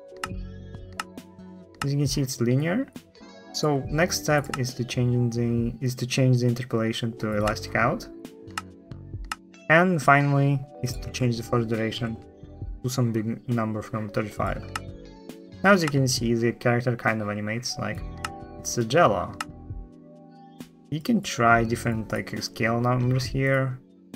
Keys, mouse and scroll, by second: 0.7 t, 0.8 t, 8.3 space, 9.0 space, 9.8 click, 14.4 space, 14.5 space, 15.6 space, 17.9 space, 19.1 space, 21.2-21.8 drag.